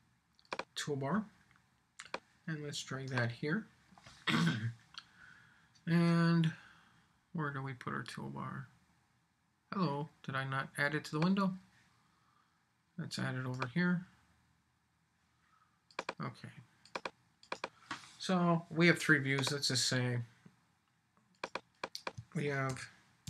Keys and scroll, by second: 22.7 shift+v.